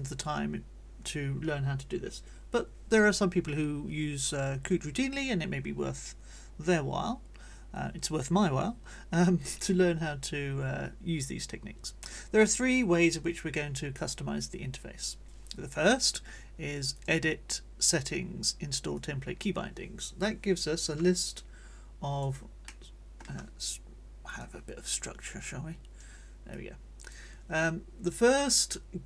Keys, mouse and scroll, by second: 16.9 click, 18.9 click, 21.2-22.4 drag, 22.7 click, 24.3 click, 25.0-26.2 drag, 26.5 click, 28.5 click.